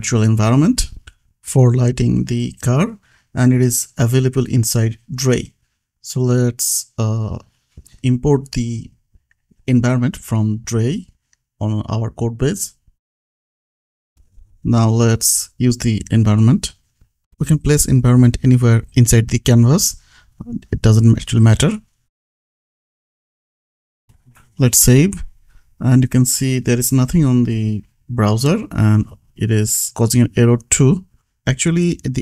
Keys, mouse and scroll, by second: 1.4 click, 4.0 click, 6.8 click, 9.9 click, 10.3 BackSpace, 11.9-13.6 typing, 13.7 Down, 14.1 Return, 14.9 ctrl+s, 15.5 click, 15.9 Escape, 16.7 click, 19.4 Return, 20.7 shift+e, 21.8 Return, 24.5 BackSpace, 24.9 Escape, 25.3 ctrl+s, 27.3 right click, 28.1 click, 30.5 click.